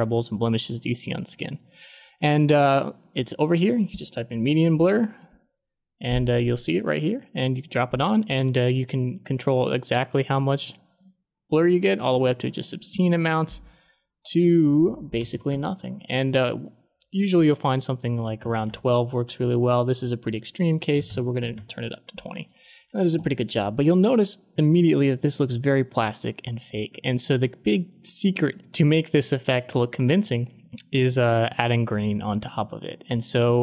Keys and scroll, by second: 4.3-5.7 typing, 15.1 1, 15.5 Return, 17.3-19.0 typing, 20.6-21.6 typing.